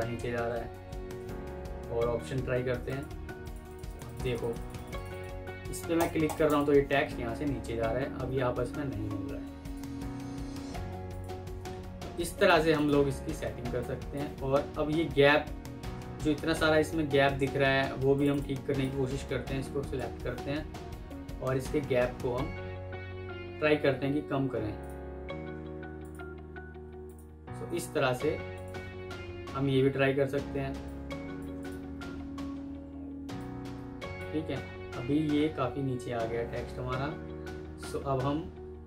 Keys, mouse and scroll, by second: 0.2 ctrl+z, 0.7 ctrl+z, 3.5 double click, 8.0 F3, 10.3 F3, 10.6 F3, 12.6 double click, 13.3 F2, 15.2 alt+scroll down 1, 16.4 F3, 18.2 double click, 28.7 Escape, 30.3 F2, 32.1 alt+scroll down 1, 34.5 alt+scroll up 1, 35.2-36.5 alt+scroll up 1.